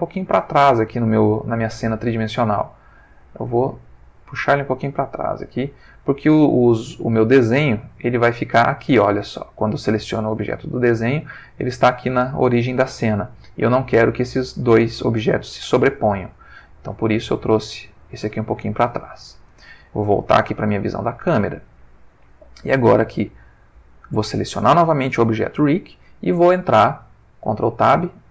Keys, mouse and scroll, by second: 0.0 click, 1.0-2.0 ctrl+middle drag, 3.1-5.6 drag, 7.5 click, 9.3 ctrl+middle click, 11.0 ctrl+middle click, 16.3 click, 20.0 click, 21.0 ctrl+middle click, 22.8 click, 27.5 ctrl+Tab.